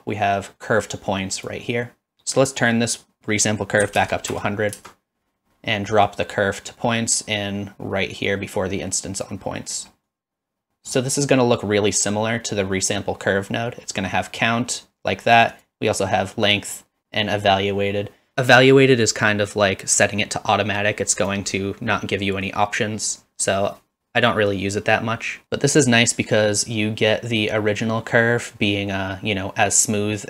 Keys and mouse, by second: 2.0-5.4 drag, 4.3 KP_0, 6.1-9.3 drag, 10.2 click, 10.8 middle click, 15.6-21.3 drag, 23.1-25.4 drag.